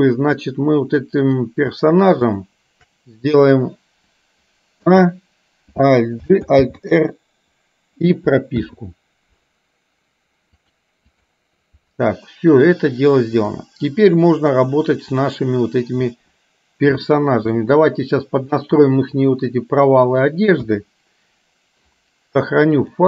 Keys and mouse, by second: 2.2 shift+click, 5.0 a, 6.4 alt+g, 6.7 alt+r, 8.7 i, 10.6 click, 13.5 click, 17.1 shift+middle click, 18.6-20.2 middle drag, 20.7 KP_1, 22.9-23.0 drag.